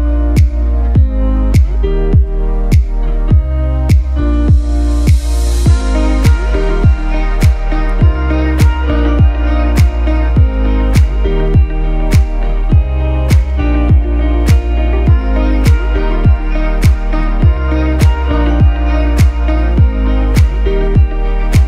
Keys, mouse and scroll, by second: 0.7 click, 3.3 right click, 4.3 click, 17.1 Right, 18.9 Down, 19.5 Right, 19.8 Down, 20.4 Right, 20.8 Down, 21.4 Left.